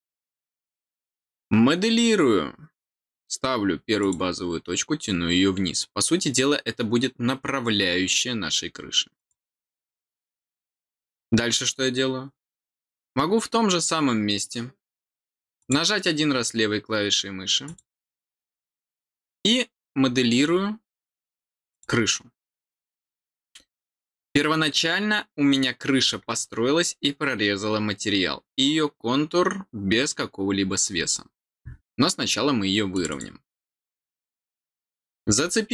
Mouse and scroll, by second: 3.9 click, 9.1 click, 15.5 click, 17.6 click, 20.0-21.2 scroll down 2, 21.2-21.7 scroll down 1, 21.7 click, 30.1-30.7 scroll down 2, 32.9 click, 33.0 click, 34.7 click.